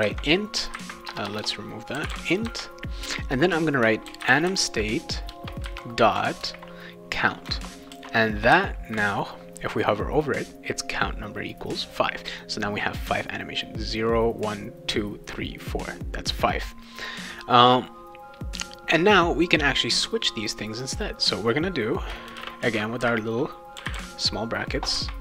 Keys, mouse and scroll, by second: 0.0-2.6 typing, 0.5 Caps_Lock, 3.8-5.6 typing, 5.3 Return, 6.4 ctrl+v, 7.9 ctrl+s, 19.6 click, 22.0-24.4 typing.